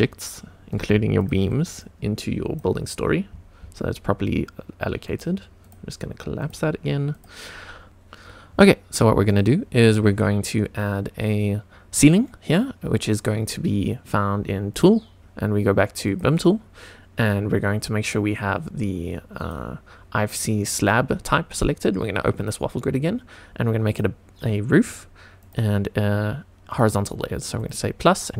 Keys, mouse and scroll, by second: 1.1 ctrl+click, 1.8 click, 3.0-4.2 scroll up 5, 4.2-4.8 scroll up 1, 5.0 click, 5.6 click, 6.4 click, 7.1 click, 7.9 click, 9.2 click, 14.7 click, 16.0 click, 17.9 click, 19.3-20.9 drag, 22.3-28.3 drag.